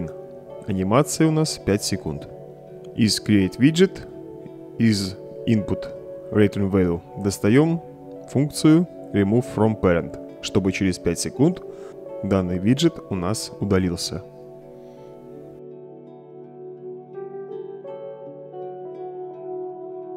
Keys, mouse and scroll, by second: 3.7 right click, 5.0-6.2 drag, 7.3-10.7 typing, 11.1 Return, 12.4-13.4 drag, 14.0-14.6 drag, 15.6 click, 16.1 click, 16.7-17.1 right drag, 17.8 right click, 18.4 click, 19.4 click.